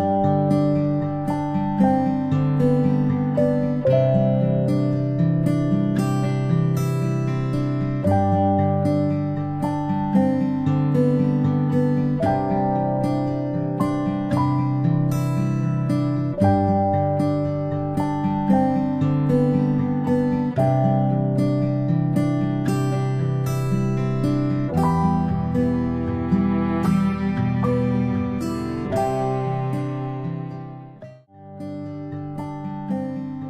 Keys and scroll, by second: 5.8 ctrl+z, 5.8 space, 14.1 ctrl+Delete, 18.1 space, 25.6 p, 28.5 ctrl+z, 28.6 Delete, 28.6 p, 29.9 ctrl+z.